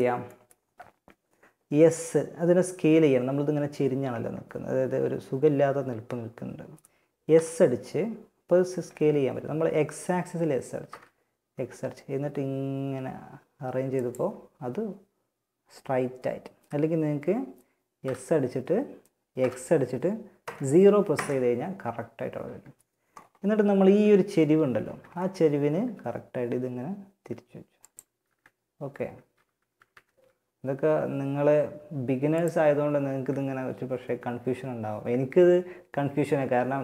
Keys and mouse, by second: 6.5 s, 17.2 s, 22.5-24.3 drag, 23.0 z, 24.0 z, 24.9 r, 27.5 z, 28.9 z, 29.1 r, 32.3 z.